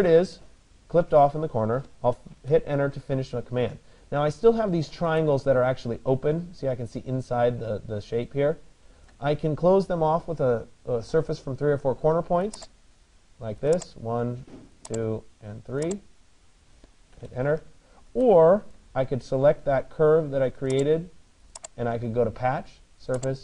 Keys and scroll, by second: 2.0 Return, 16.8 Return.